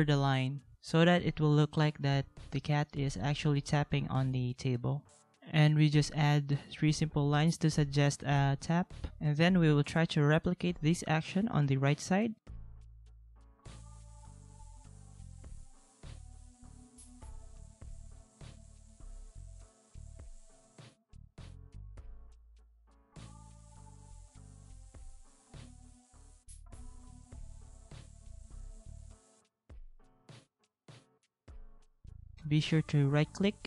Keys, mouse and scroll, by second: 0.4 ctrl+z, 2.3 ctrl+a, 3.6 alt+click, 12.3 ctrl+-, 15.6 ctrl+=, 22.2 ctrl+c, 23.4 ctrl+g, 23.8 ctrl+z, 25.2 ctrl+g, 27.0 ctrl+v, 28.5 ctrl+x, 28.6 ctrl+z, 29.9 ctrl+v, 30.8 ctrl+z.